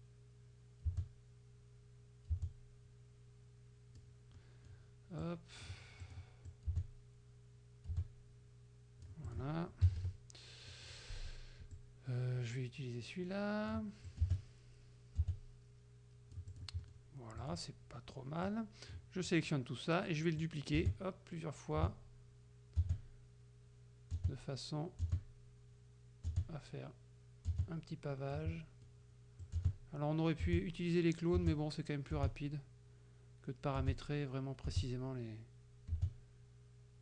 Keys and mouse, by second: 1.0 space, 2.4 space, 4.4 click, 5.3 click, 6.1 click, 6.6-9.3 drag, 6.8 space, 7.9 space, 9.4 click, 9.9 KP_Subtract, 10.8 click, 11.8-14.0 drag, 14.1-16.8 drag, 14.3 space, 15.3 space, 16.8 middle click, 17.5 click, 18.5-19.1 drag, 19.3 middle click, 20.5-28.6 drag, 20.9 space, 21.8 space, 22.8 space, 24.2 space, 25.1 space, 26.4 space, 27.6 space, 29.5-37.0 drag, 29.7 space, 30.5 space, 31.5 space, 32.2 space, 33.9 space, 34.8 space, 36.0 space.